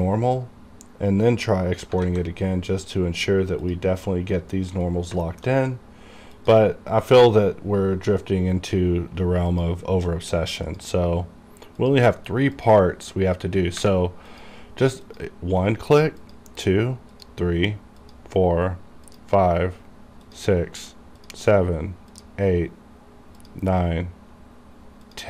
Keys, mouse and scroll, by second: 2.0 click, 2.1 alt+a, 3.7 click, 5.0 scroll down 1, 5.3 shift+middle click, 6.5 click, 9.6 click.